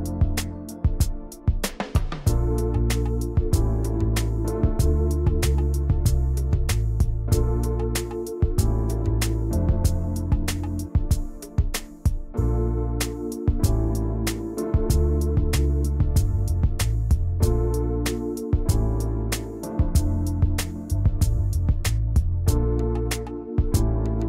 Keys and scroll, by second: 0.0-3.7 typing, 6.6 alt+Right, 11.0 alt+Right, 11.5 shift+Right, 12.1 Right.